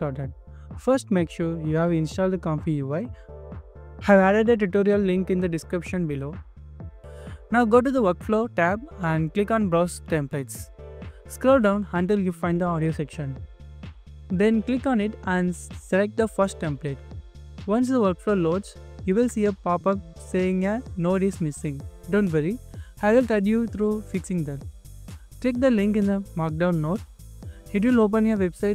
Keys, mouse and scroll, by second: 11.6 scroll down 1, 16.2 scroll down 1, 24.8 scroll down 1, 25.5 scroll up 1, 26.8 scroll down 1, 27.3 scroll up 1.